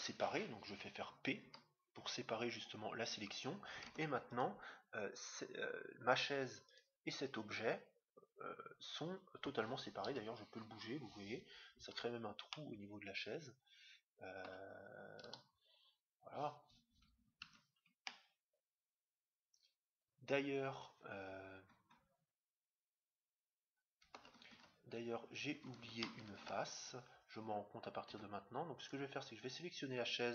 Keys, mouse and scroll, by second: 1.3 p, 3.8 Tab, 4.3-5.8 right drag, 6.6-8.2 right drag, 10.0 g, 12.5-14.2 middle drag, 15.3 g, 18.0-19.8 middle drag, 24.1-25.8 middle drag, 24.5 Tab, 26.4 ctrl+Tab, 28.7-30.3 right drag.